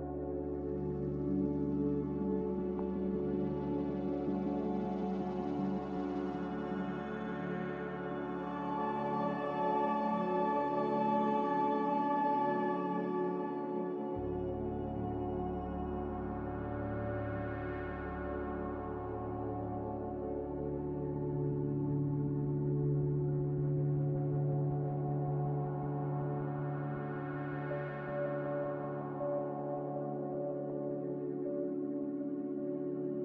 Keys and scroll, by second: 2.5 c, 12.8 z, 16.2 typing, 16.7 Return, 27.5 2, 27.6 0, 27.9 Return, 31.3 c.